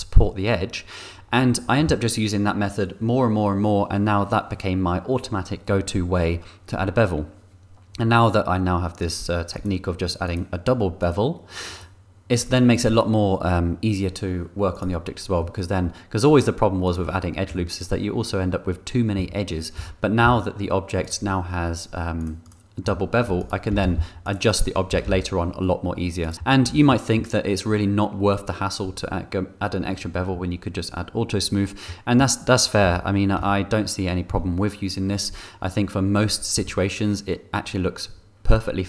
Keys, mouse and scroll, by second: 9.0 click, 9.5 click, 10.2 click, 11.0 click, 11.7 click, 14.7 click, 15.3 middle click, 16.8 click, 17.5 middle click, 19.1 Tab, 19.8 a, 20.2 s, 20.4-20.8 scroll up 2, 20.5 middle click, 22.2 click, 22.4 click, 22.8 click, 23.3 click, 23.3 3, 23.8 g, 24.2 click, 24.5-26.2 middle drag, 25.0 g, 25.0 y, 26.3 Tab, 27.0 2, 27.5 click, 32.4 click, 33.2 2, 33.7 1, 34.6 2, 36.9 1.